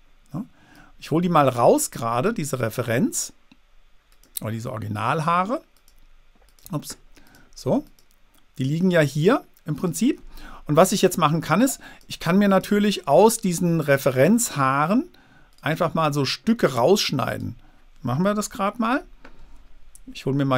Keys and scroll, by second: 18.6 super+-.